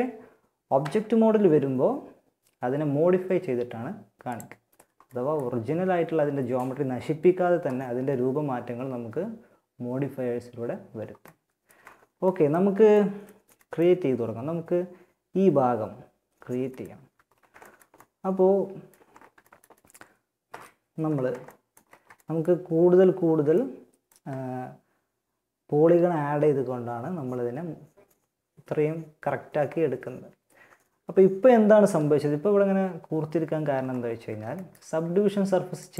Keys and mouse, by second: 0.0 Tab, 3.6-5.3 drag, 5.3-7.6 middle drag, 10.4 middle click, 15.6 middle click, 16.1 Tab, 19.6 KP_1, 31.0 Tab, 32.6 Tab, 34.2 Tab, 35.0-35.9 drag.